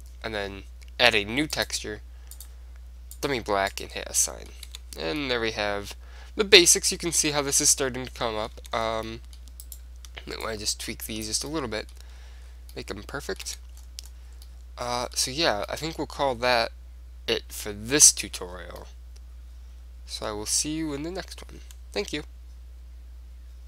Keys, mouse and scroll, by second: 1.7-5.7 drag, 4.3-7.3 middle drag, 4.8 Tab, 8.7 Tab, 8.9 middle click, 9.8 click, 11.3-12.5 drag, 12.5-15.0 middle drag, 13.7 Tab, 18.0-20.6 middle drag.